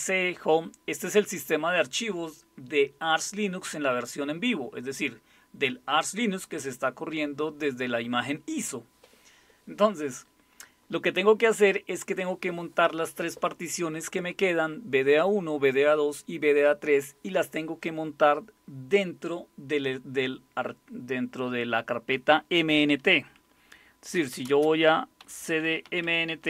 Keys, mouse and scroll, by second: 23.9-26.4 typing.